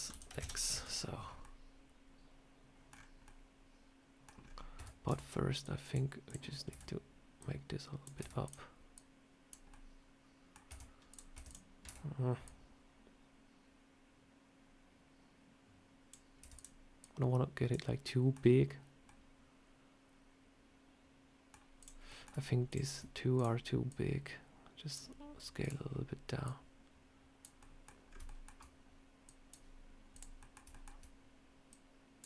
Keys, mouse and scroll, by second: 0.6 Tab, 1.1 scroll down 1, 1.3 middle click, 2.8 scroll down 4, 3.1 middle click, 4.3 scroll up 2, 4.6 Tab, 5.0 Tab, 5.5 click, 6.2 click, 6.6 Tab, 7.3 click, 8.1 Tab, 8.3 click, 8.8 click, 9.6 middle click, 10.6 Tab, 11.0 click, 11.2 Tab, 11.4 click, 11.7 Tab, 12.3 click, 16.3 Tab, 16.4 click, 16.9 click, 19.0 middle click, 21.7 click, 22.0 middle click, 22.6 shift+click, 23.2 click, 23.8 click, 23.8 shift+click, 25.5 click, 25.5 shift+click, 26.3 click, 27.5 middle click, 28.0 scroll up 3, 28.1 shift+middle click, 29.1 click, 30.0 click, 30.3 middle click, 30.6 shift+middle click, 31.6 click.